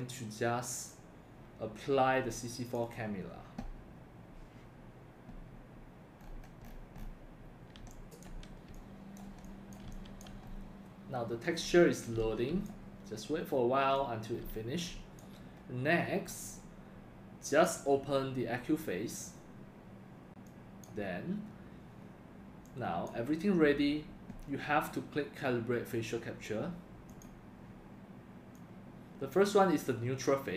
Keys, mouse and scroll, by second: 2.8 click, 6.2 scroll up 4, 6.4 scroll down 1, 6.7-7.1 scroll up 4, 7.4 click, 7.8 x, 8.7 x, 9.0 click, 9.9 c, 10.5-10.9 scroll up 3, 11.7 x, 12.1 c, 12.6 click, 13.4 scroll up 1, 14.0 x, 14.2 click, 14.7 drag, 15.5 scroll down 1, 17.5 click, 20.4-20.8 drag, 22.6 drag, 27.1 click.